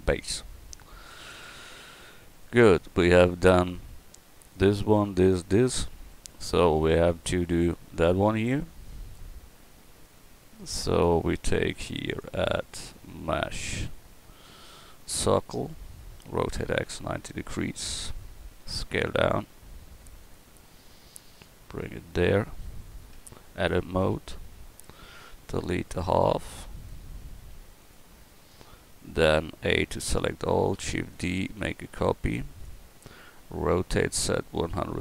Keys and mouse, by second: 1.0-1.8 middle drag, 2.4-3.5 drag, 3.5 g, 8.5 middle click, 9.0-11.3 middle drag, 16.3 r, 18.5 s, 23.2 Tab, 24.0 a, 25.2 b, 27.4 x, 29.4 a, 30.8 shift+d, 33.7 r.